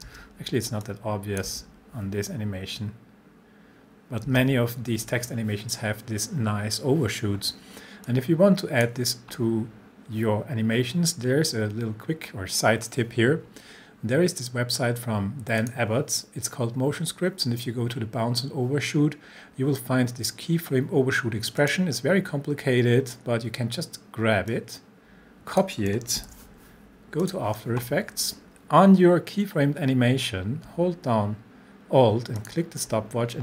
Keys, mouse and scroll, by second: 0.1 space, 0.8-1.5 click, 1.5 space, 4.3 space, 8.1-9.0 drag, 15.9 click, 19.3 scroll up 1, 21.6 click, 24.5-25.8 drag, 26.2 ctrl+c, 27.2 click, 30.7 alt+click, 32.4 alt+click.